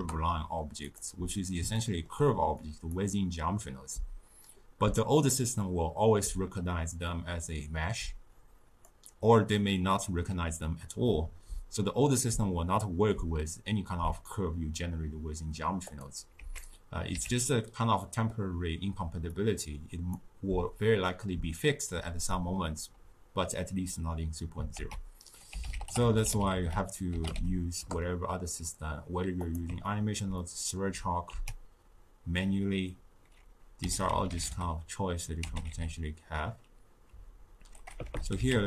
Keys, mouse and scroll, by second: 1.7 ctrl+middle click, 2.6 click, 7.0-10.0 drag, 15.8 click, 16.3 x, 17.1 q, 19.3-22.3 drag, 24.7 ctrl+a, 29.8 ctrl+middle click, 30.3-31.3 scroll down 1, 31.3 ctrl+a, 38.0 BackSpace.